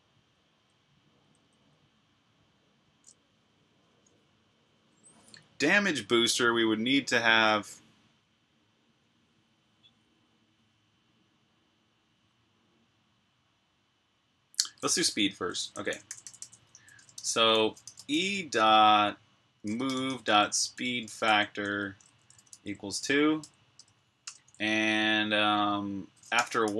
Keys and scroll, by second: 0.1-1.3 typing, 14.2-17.6 typing, 19.2-23.7 typing, 25.9-26.7 typing.